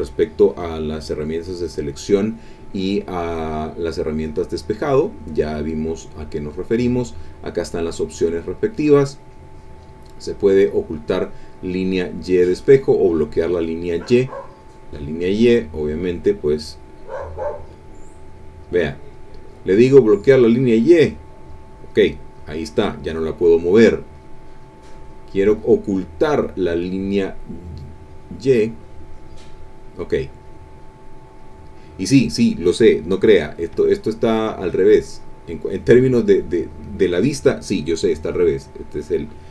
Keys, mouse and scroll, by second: 3.4 click, 4.2 click, 4.9 click, 5.2 click, 6.0 click, 9.0 click, 9.7 click, 14.5 click, 15.2 click, 16.3-17.4 middle drag, 18.3 click, 19.4 click, 20.8 click, 24.2 click, 24.9 click, 25.5 click, 29.0 click, 30.4 click, 31.4 click, 33.9 click, 35.1 click, 35.7 click, 36.5 click.